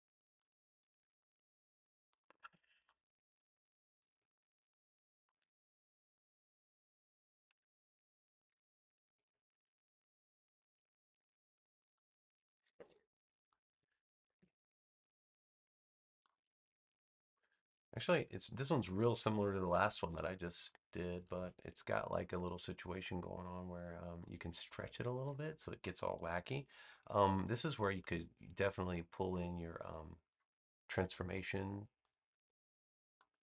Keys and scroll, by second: 8.4 v, 12.2 space, 14.3 super+v, 18.0 a, 19.6 BackSpace.